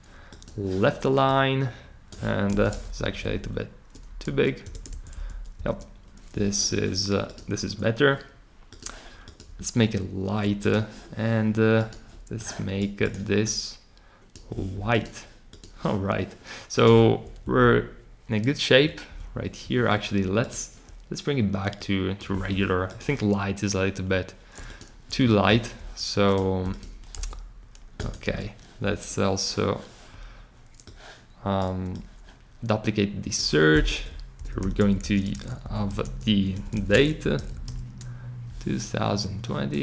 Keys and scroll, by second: 2.5 super+k, 3.0 shift+Down, 3.1 shift+Down, 4.6 Return, 5.1 shift+Left, 5.5 shift+Right, 17.4 Up, 17.6 Up, 19.1 Down, 27.1 super+c, 28.2 super+v, 33.8 Return, 34.1-38.0 typing.